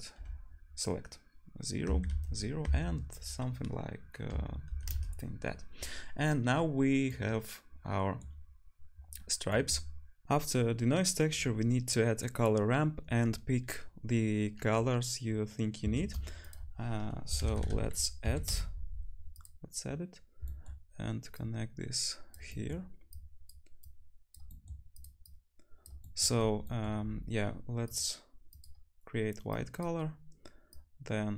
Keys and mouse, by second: 7.5-10.2 drag, 16.0 shift+a, 21.4-28.6 drag, 23.8-31.3 right drag, 23.8 t, 25.3 t, 30.7-31.3 drag.